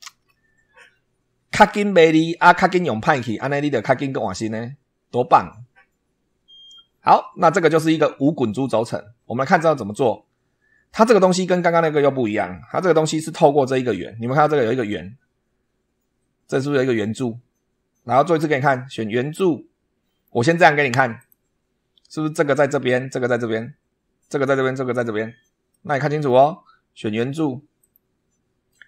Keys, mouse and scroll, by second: 2.6 click, 6.9 scroll up 1, 7.4 scroll down 1, 9.1 scroll down 1, 12.1 scroll down 1, 12.7 shift+middle click, 21.1 click, 25.6 middle click, 27.7 click.